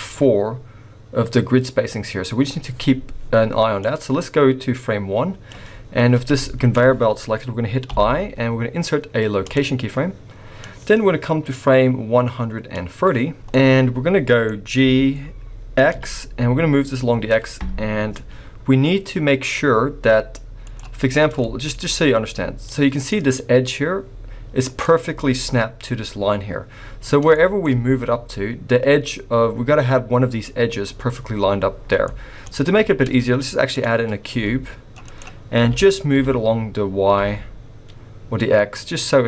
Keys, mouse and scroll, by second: 3.8 click, 6.4 shift+middle click, 6.4-6.7 shift+scroll up 1, 7.9 i, 10.6 click, 13.5 middle click, 14.8 g, 21.0-21.3 scroll up 2, 21.4 shift+middle click, 21.7-22.7 scroll up 2, 22.7 middle click, 24.8 middle click, 26.7-27.3 scroll down 4, 27.3 shift+middle click, 32.1 shift+middle click, 32.9 shift+a, 34.3 s, 35.6 g.